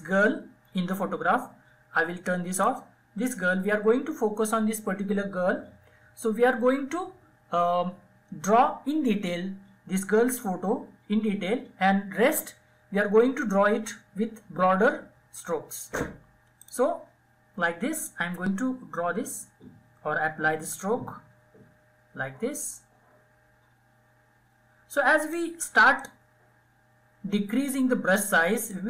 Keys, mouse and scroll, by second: 1.3 click, 15.4-28.8 drag.